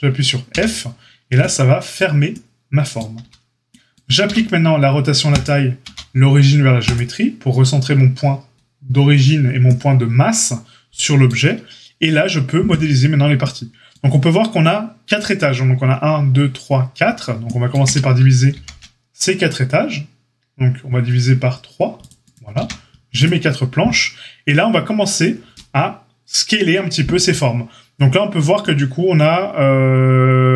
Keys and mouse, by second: 0.5 f, 3.2 Tab, 4.2 q, 5.8 q, 17.8 Tab, 18.5 ctrl+r, 22.5 a.